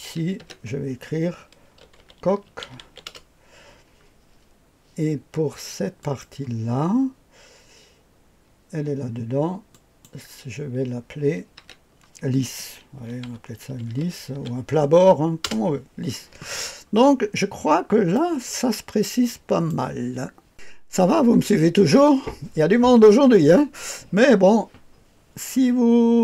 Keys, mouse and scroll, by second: 0.4 F2, 1.5-3.3 typing, 6.0 click, 9.7 click, 11.5 F2, 12.7-14.8 typing, 15.4 Return, 16.7-18.1 scroll down 2, 17.1-17.8 typing, 18.1-19.7 drag, 19.7 right click, 20.5 click.